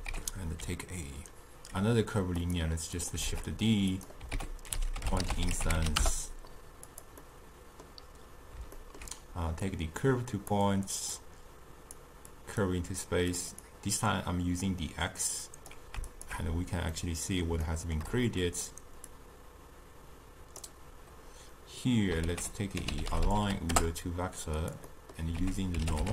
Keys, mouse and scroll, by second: 3.3 shift+d, 10.6 click, 12.0-17.1 drag, 17.1-19.3 middle drag, 19.3-26.1 drag.